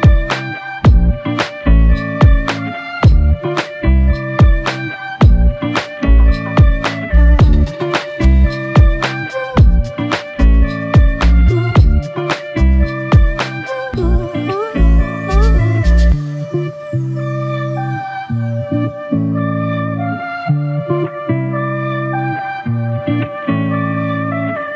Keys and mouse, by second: 7.8 alt+m, 11.0 shift+click, 12.9 shift+click, 15.4 double click, 16.9 alt+click, 18.8 double click.